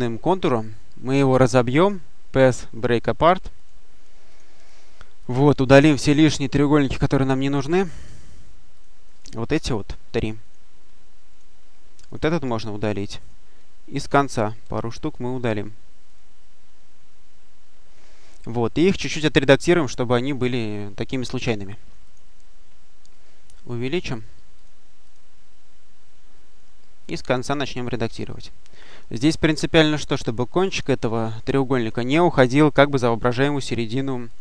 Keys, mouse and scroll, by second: 0.3 click, 3.4 click, 4.1 click, 5.1 click, 7.1-8.4 drag, 8.6 click, 9.9 Delete, 10.3 click, 10.7 Delete, 11.2 click, 11.5 Delete, 11.9 click, 12.2 Delete, 13.1 click, 13.4 Delete, 14.0 click, 14.5 Delete, 15.0 click, 15.3 Delete, 15.9 click, 16.5 Delete, 21.9 click, 23.8 click, 24.4 click, 26.9 click, 28.3 click, 30.6 click, 33.1 click, 34.1-34.4 drag.